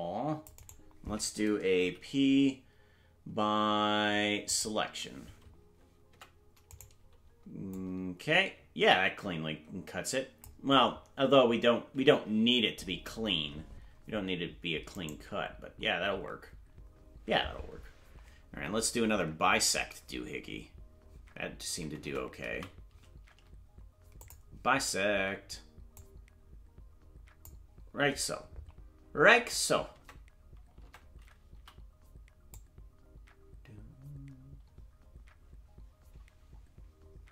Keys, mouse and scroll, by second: 7.7 Tab, 7.7-10.7 drag, 7.7 right click, 12.5 ctrl+z, 15.0-23.0 right drag, 23.0 Tab, 23.0 a, 24.2 click, 25.9-27.4 drag, 30.0 Tab, 30.8 Tab, 31.5 c.